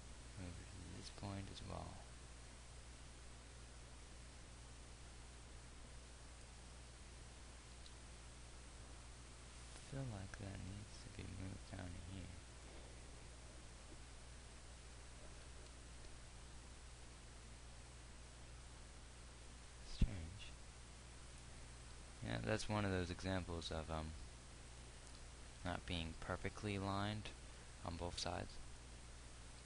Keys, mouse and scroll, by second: 8.3 g, 16.2 g, 22.0 click, 22.8 g.